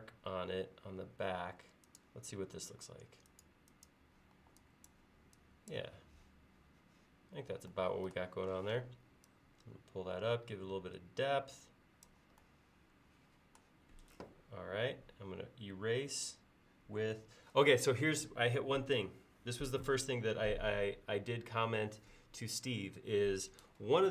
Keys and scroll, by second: 4.4 e, 8.7 p, 14.1 e.